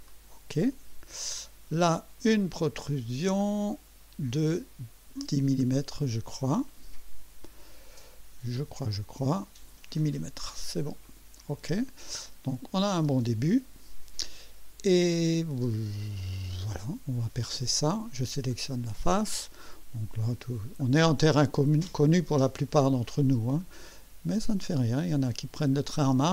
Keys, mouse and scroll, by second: 0.0 click, 3.4 click, 4.3-5.6 drag, 6.5 click, 8.9 click, 9.9 click, 11.0 click, 12.2 click, 13.4 right click, 18.5 click, 20.8 click, 22.2 scroll up 1, 23.6 click.